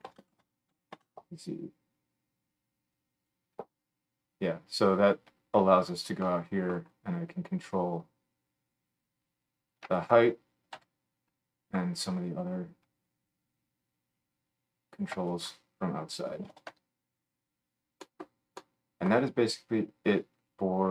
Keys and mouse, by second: 0.2-6.7 shift+middle drag, 13.0-20.9 shift+drag, 18.0-20.9 middle drag.